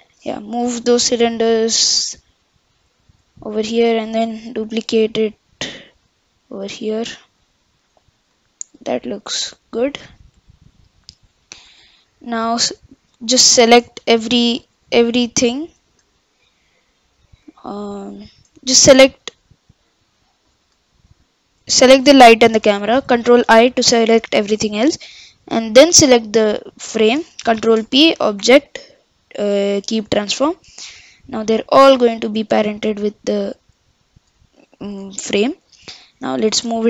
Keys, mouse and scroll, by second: 0.6 g, 4.0 shift+d, 6.8-8.0 middle drag, 8.0 click, 8.3-10.5 middle drag, 10.5-12.9 scroll up 1, 12.9 click, 14.2 click, 14.6-15.5 middle drag, 15.5 click, 16.3 shift+click, 17.3 shift+click, 18.1 shift+click, 19.7 click, 20.2-21.1 middle drag, 21.1 shift+click, 23.5 ctrl+i, 25.8 shift+click, 27.6 ctrl+p, 30.9 click, 31.5 g, 35.3 KP_1, 35.9-36.8 scroll up 3.